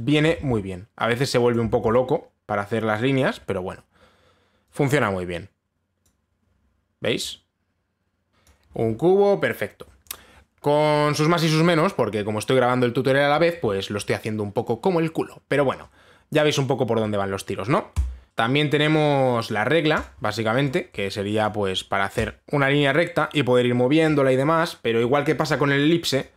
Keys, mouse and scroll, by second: 0.8 click, 1.0 ctrl+z, 2.2 click, 2.3 ctrl+z, 3.6 click, 6.7 click, 8.3 click, 9.1 click, 18.3 click, 20.6 click, 22.0 click, 22.8 click.